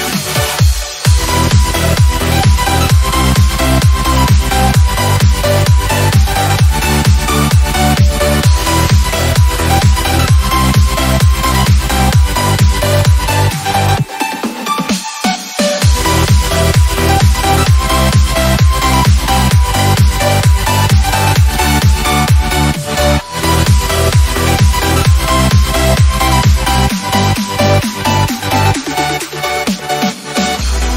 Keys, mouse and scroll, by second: 5.4 scroll up 1, 7.7-14.6 drag, 15.8 right click, 16.6-20.0 drag, 26.3 right click, 27.0 click, 28.4-30.3 shift+drag.